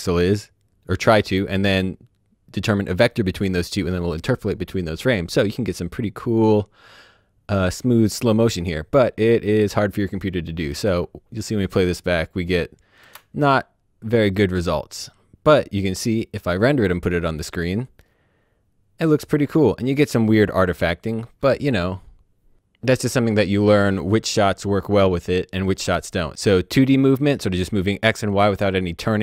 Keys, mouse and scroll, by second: 8.0 click, 10.7 space, 12.9 space, 14.0 click, 14.4 space.